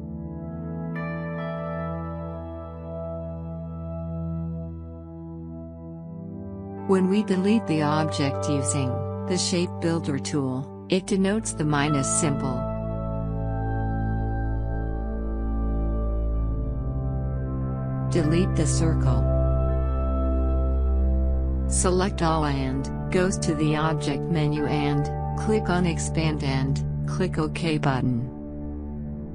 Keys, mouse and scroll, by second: 18.1 scroll up 2, 19.4 click, 22.0-25.8 drag.